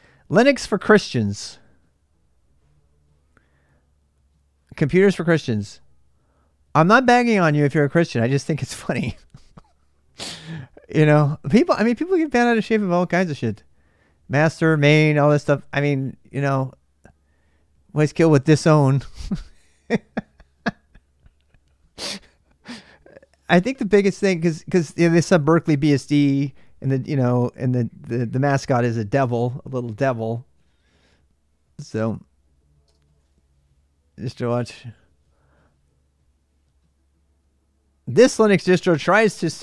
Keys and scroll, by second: 39.4 l.